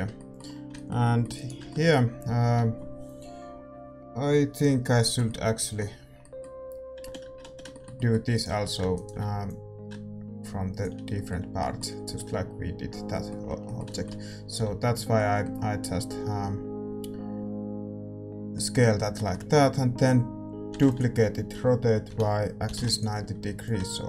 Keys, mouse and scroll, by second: 0.1-10.5 middle drag, 1.3-4.8 right drag, 2.4 a, 7.4 z, 8.3-10.6 right drag, 9.4-12.0 drag, 11.0-17.8 middle drag, 12.0 z, 14.4 a, 14.6 a, 19.1-21.5 middle drag, 20.7 shift+d, 21.5 r, 23.6-24.0 drag.